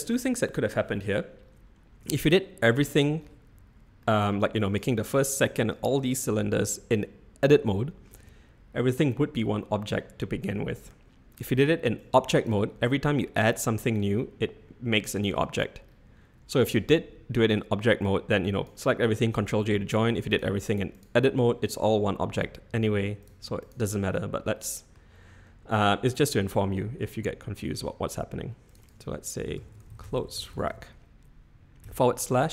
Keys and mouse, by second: 2.0 Tab, 2.7 click, 4.0 middle click, 4.6 click, 5.3 click, 5.7 click, 6.7 middle click, 8.1 Tab, 11.9 click, 12.8 click, 18.1-18.6 drag, 20.4-21.0 drag, 23.3 click, 24.5-24.9 middle drag, 26.7 middle drag, 28.8-32.4 drag, 31.8 /.